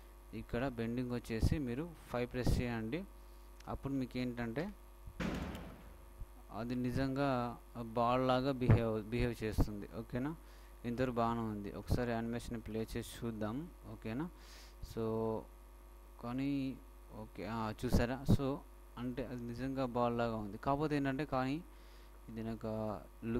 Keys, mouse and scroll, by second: 3.3-5.2 drag, 15.1 alt+a.